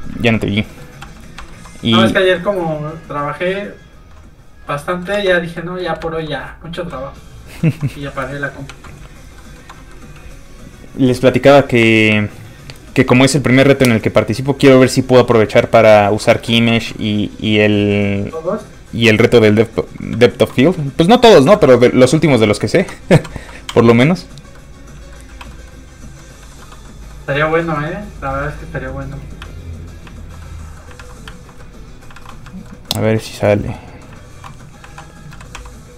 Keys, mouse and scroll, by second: 0.3 shift+middle click, 0.5 scroll up 1, 1.1 f, 1.2 click, 1.5 shift+middle click, 1.8 middle click, 1.9 middle click, 2.8 click, 5.2 ctrl+z, 5.4 middle click, 6.9 click, 7.8 shift+middle click, 8.0 middle click, 8.7 ctrl+s, 9.4 shift+middle click, 9.7 middle click, 9.8 middle click, 10.0 scroll up 1, 16.7 shift+middle click, 19.7 shift+click, 20.3 shift+middle click, 21.5 middle click, 22.1 middle click, 22.8 Tab, 23.2 a, 23.7 q, 24.3 click, 24.6 middle click, 25.3 q, 25.5 middle click, 26.4 shift+middle click, 26.7 shift+scroll up 2, 26.9 middle click, 27.5 shift+middle click, 29.7 alt+click, 30.2 alt+click, 30.5 middle click, 31.0 alt+a, 31.4 alt+click, 31.6 middle click, 32.2 alt+a, 32.3 middle click, 32.5 shift+middle click, 32.8 shift+scroll up 1, 32.9 middle click, 33.5 alt+click, 33.8 middle click, 34.6 middle click, 34.9 alt+a, 35.6 q, 35.6 a.